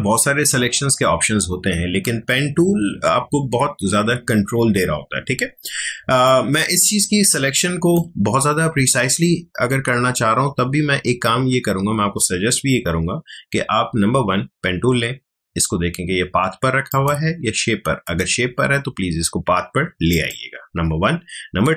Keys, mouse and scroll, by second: 5.9 space, 6.2-10.5 ctrl+drag, 16.9 click, 20.1 click.